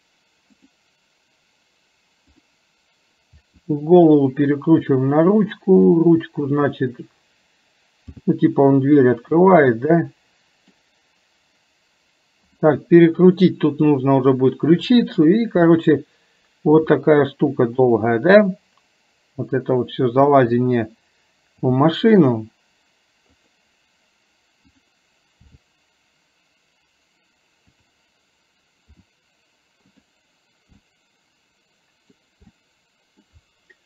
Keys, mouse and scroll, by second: 0.7 click, 6.5 click, 9.8 scroll up 1, 9.9 middle click, 10.8 scroll down 1, 13.7 click, 18.4-20.6 middle drag, 24.7 click, 30.8-32.2 middle drag, 32.6-33.3 middle drag.